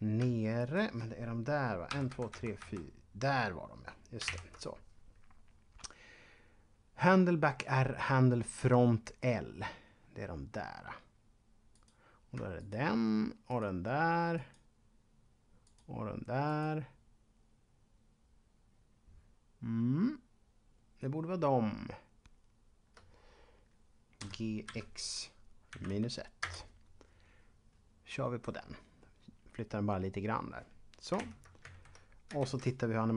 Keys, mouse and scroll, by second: 0.6 shift+right click, 1.9 Right, 2.1 Right, 11.7 right click, 12.6 shift+right click, 15.6 shift+right click, 24.0-26.2 typing, 26.4 Return, 31.2 ctrl+Up, 31.9 Left, 32.4 alt+a.